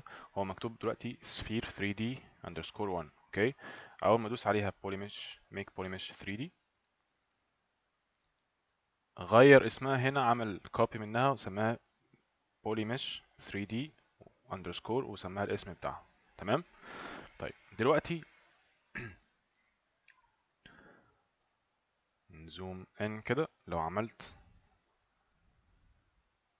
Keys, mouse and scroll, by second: 9.1 click, 11.7 click, 15.9 click, 17.4 click, 21.9 ctrl+right click, 25.1 click.